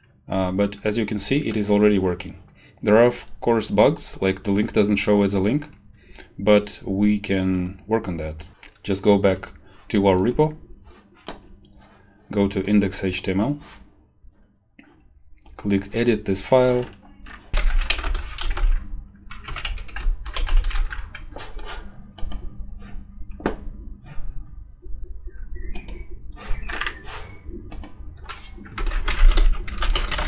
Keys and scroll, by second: 17.3-18.4 typing, 18.4 Left, 18.5 ctrl+v, 19.4 End, 19.6 Left, 20.3 Right, 20.5 ctrl+shift+Left, 20.7 a, 28.8 ctrl+a, 28.8-30.2 typing.